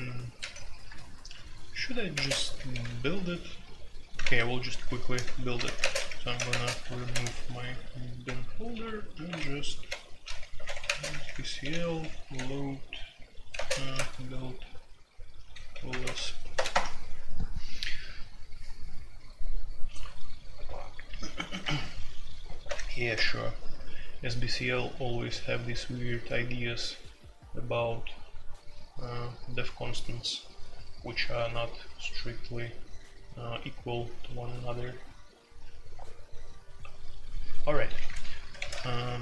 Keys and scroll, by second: 0.4 ctrl+d, 0.8 l, 0.9 Return, 2.0-2.7 typing, 2.5 Return, 2.8 Return, 4.2-12.3 typing, 13.5 typing, 13.9 Tab, 15.6-16.7 typing, 22.6-23.1 typing, 37.9-39.2 typing, 37.9 Return, 38.5 ctrl+c, 38.8 Return.